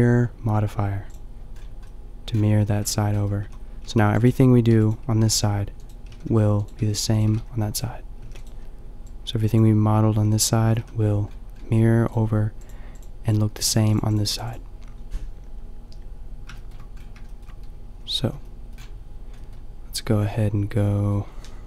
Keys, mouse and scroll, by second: 1.5-1.8 scroll up 1, 2.8 Tab, 3.4 a, 3.9 a, 5.3 g, 6.8 g, 7.3 g, 8.3 g, 9.5 g, 10.8 a, 16.6 shift+middle click, 17.9 a.